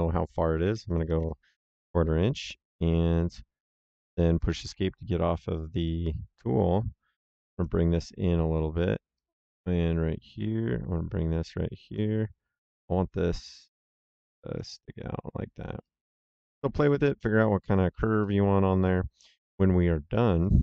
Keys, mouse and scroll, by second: 0.6 KP_Decimal, 0.8 KP_2, 1.0 KP_5, 1.1 KP_Enter, 3.8 Escape, 5.7 click, 9.1 click, 12.6 click, 15.7 click, 20.3 click.